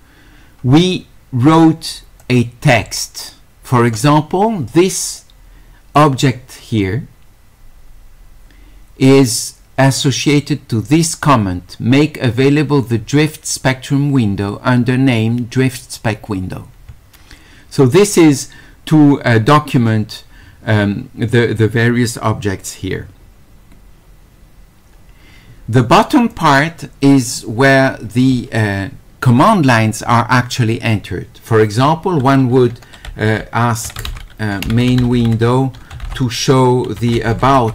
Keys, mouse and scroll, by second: 2.2-3.9 drag, 5.9 click, 11.0 click, 26.3 click, 33.9 q, 35.1 d, 37.0 q.